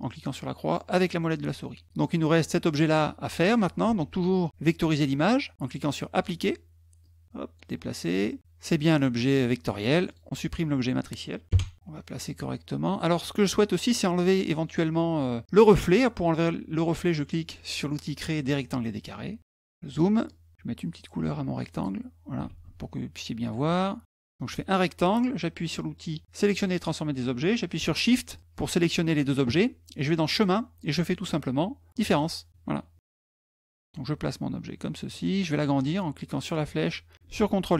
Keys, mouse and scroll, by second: 0.9 middle click, 1.4 middle click, 1.8 click, 2.5 click, 3.7 ctrl+z, 5.9 click, 6.8 click, 9.9 click, 11.7-13.2 drag, 13.8 click, 18.7 click, 19.4 middle click, 19.4-20.0 scroll up 2, 19.7 middle click, 21.3 click, 23.5 click, 26.3 click, 28.1 shift+click, 30.1 click, 31.9 click, 32.9 middle click, 32.9 scroll down 1, 33.6-34.7 drag, 34.9 middle click, 36.2-37.7 drag.